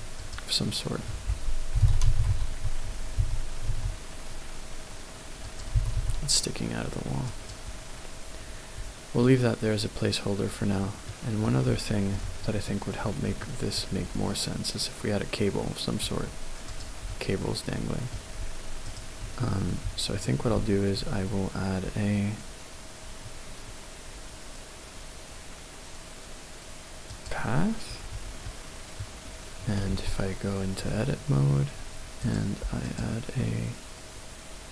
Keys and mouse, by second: 1.7-3.7 typing, 5.5 click, 5.8 g, 6.0 y, 7.3 click, 11.1-11.5 middle drag, 12.2-13.3 shift+middle drag, 13.4-13.8 shift+middle drag, 16.6 click, 19.0 shift+right click, 20.5 shift+a, 28.5-30.3 middle drag, 30.3 Tab, 32.2 click, 32.8-34.7 drag.